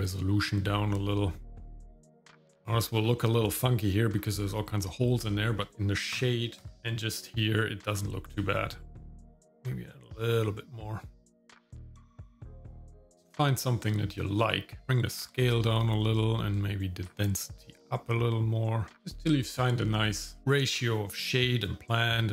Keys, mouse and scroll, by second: 2.0 shift+middle click, 2.2 scroll down 2, 2.3 shift+middle click, 2.6 click, 2.9 scroll up 1, 4.2 middle click, 5.4 shift+middle click, 6.6 KP_0, 8.3-11.6 shift+drag, 12.4 click, 14.8 shift+click, 17.0-20.4 shift+drag, 21.7 shift+middle click.